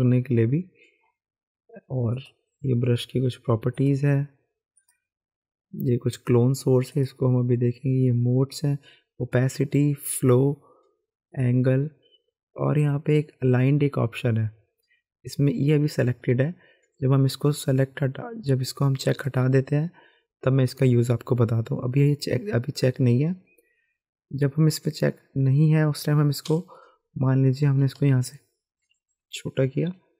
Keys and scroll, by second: 26.5 b, 28.1-29.1 typing.